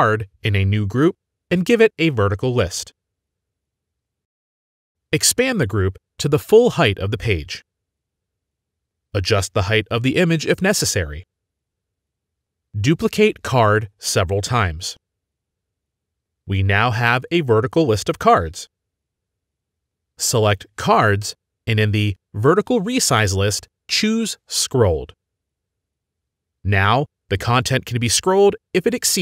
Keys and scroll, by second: 0.5-1.7 typing, 1.7 Return, 4.3 typing, 15.5 ctrl+d, 16.3 ctrl+d.